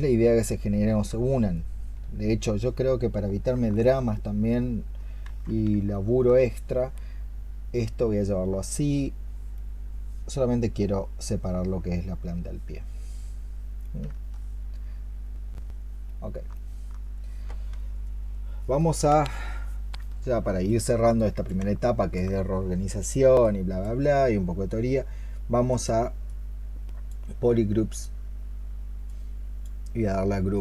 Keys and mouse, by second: 0.8 alt+click, 3.6 alt+click, 5.1 ctrl+z, 5.8 alt+click, 13.9 alt+click, 16.3 alt+click, 16.4 alt+click, 21.7 alt+click.